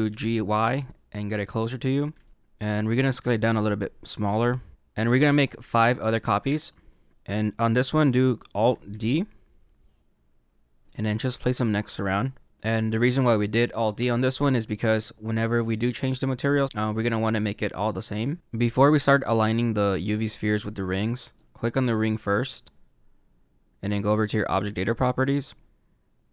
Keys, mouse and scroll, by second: 0.0 g, 1.8 y, 1.8 y, 2.2 middle click, 8.8 alt+d, 11.1 alt+d, 12.5 click, 19.2 middle click, 22.0 click, 24.4 click, 25.5-26.3 scroll down 3.